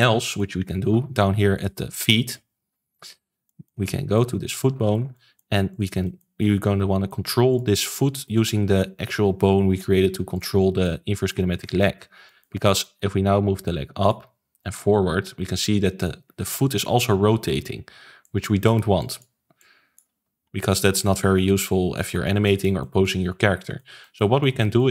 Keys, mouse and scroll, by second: 0.9 ctrl+s, 1.5 click, 2.9 click, 2.9 KP_Decimal, 3.4-3.7 middle drag, 3.7-4.1 scroll down 5, 4.1-4.7 middle drag, 4.7 ctrl+s, 4.9 scroll down 2, 5.1-5.7 middle drag, 5.7 click, 6.0-7.5 shift+middle drag, 7.5 click, 7.7-8.4 shift+middle drag, 8.4 click, 8.6 r, 10.5 ctrl+z, 10.8-11.4 middle drag, 11.4-12.2 scroll down 2, 12.2-12.6 shift+middle drag, 12.6 ctrl+s, 12.8-13.6 middle drag, 13.6 click, 14.6 click, 17.1 alt+g, 18.2 click, 18.9 click, 19.5 click, 21.0 alt+r, 21.2 alt+g, 21.9 click, 22.1 ctrl+s, 22.4-24.9 shift+middle drag.